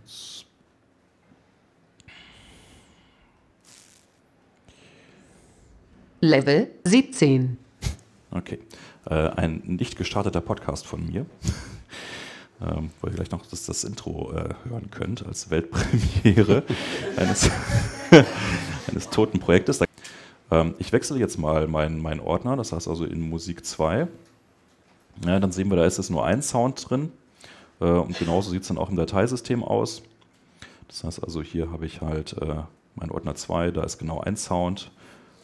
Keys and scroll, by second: 28.0 super+Tab, 33.8 super+Up.